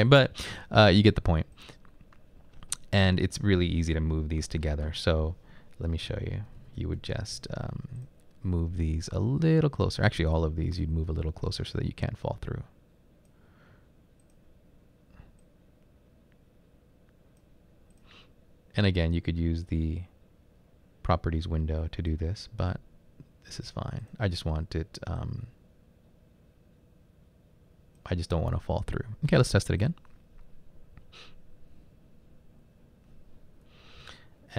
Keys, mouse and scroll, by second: 6.1-7.3 typing, 22.6-23.4 typing, 28.7 typing, 34.1 Right.